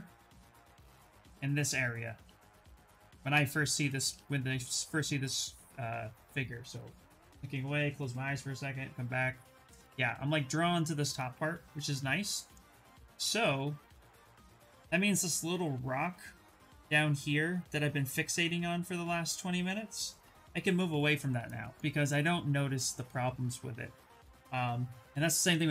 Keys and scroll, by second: 1.1 ctrl+shift+space, 11.8 ctrl+shift+space, 14.6 s.